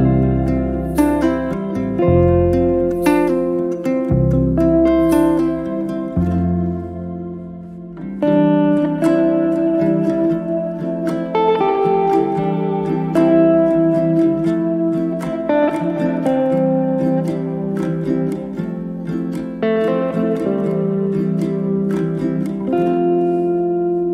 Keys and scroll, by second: 0.6 q, 3.8-5.2 typing, 16.2-17.8 typing, 17.9 Return.